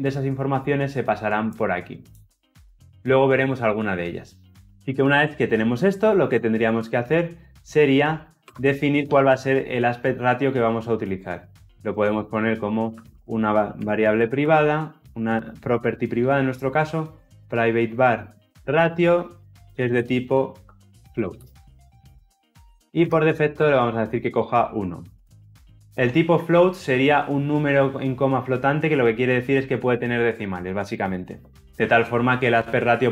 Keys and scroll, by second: 13.5 Return, 22.1 Return.